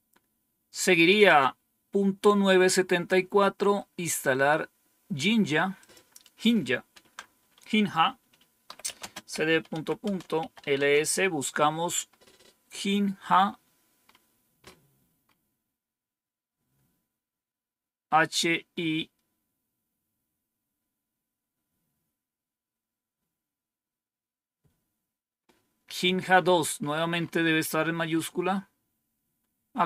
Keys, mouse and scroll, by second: 1.1 click, 5.7 click, 8.3-10.8 typing, 9.9 Return, 26.7 scroll up 2, 27.6-29.8 scroll up 2.